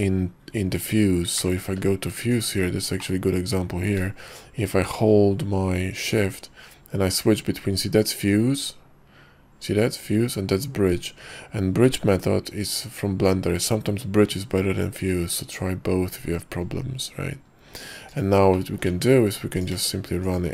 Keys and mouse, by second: 1.5 y, 3.1-4.5 drag, 18.2 shift+click, 18.8 click, 19.0 Tab, 19.7 click, 20.4 shift+click.